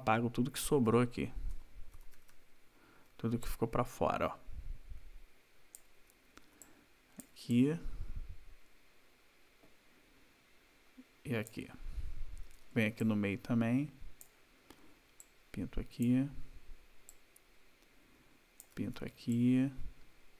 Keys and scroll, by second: 1.5 [, 5.9 \, 12.0 ], 14.8 ], 18.7 \.